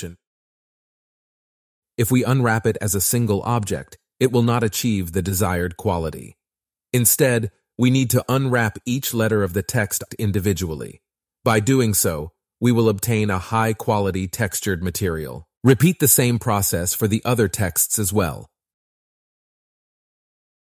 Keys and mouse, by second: 0.0 Tab, 0.0 u, 6.9 Tab, 7.1 a, 8.0 u, 9.9 Tab, 11.5 middle click, 11.8 click, 13.1-14.5 middle drag, 14.5 click, 15.1 click, 16.1 Tab, 16.1 a, 16.5 u, 18.0 Tab, 18.7 click, 19.6 middle click, 20.5 middle click.